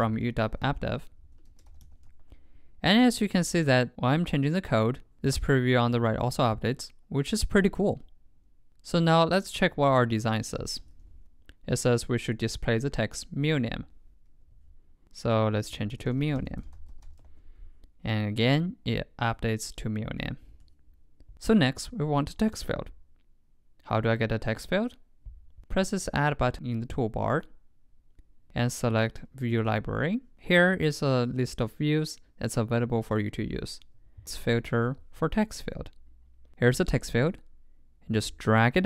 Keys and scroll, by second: 2.2 super+Right, 10.0 super+Tab, 10.8 super+m, 17.3 super+Right.